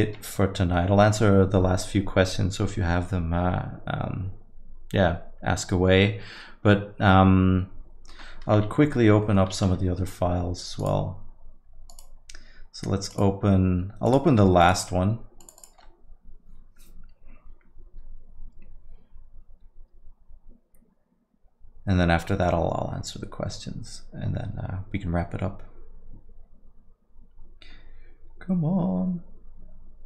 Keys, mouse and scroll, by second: 0.2 ctrl+s, 8.1 middle click, 8.5 z, 9.2 middle click, 9.9 ctrl+s, 10.8 click.